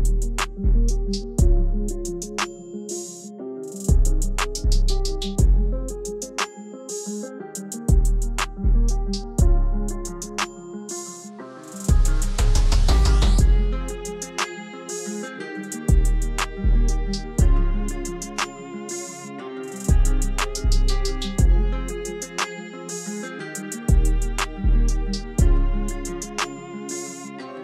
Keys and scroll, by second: 7.6-8.8 typing, 12.1 shift+t, 18.9 f, 19.4 t, 22.3 c.